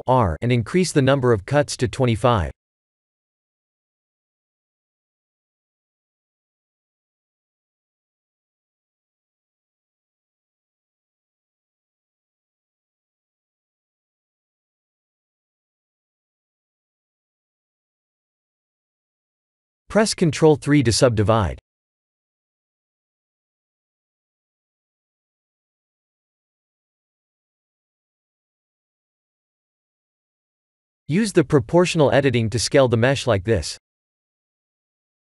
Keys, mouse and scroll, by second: 0.8 click, 1.5 click, 3.1 Tab, 6.7 Tab, 7.5 Tab, 8.4 Tab, 9.4 middle click, 9.9 3, 10.2 click, 11.2 KP_3, 11.8 a, 13.6 s, 16.3 middle click, 17.9 KP_1, 19.8 Tab, 19.8 click, 20.5 ctrl+3, 24.2 Tab, 24.8 middle click, 25.4 3, 25.8 click, 26.4-27.0 scroll down 3, 26.8 middle click, 27.6 KP_1, 30.7 click, 31.4 s.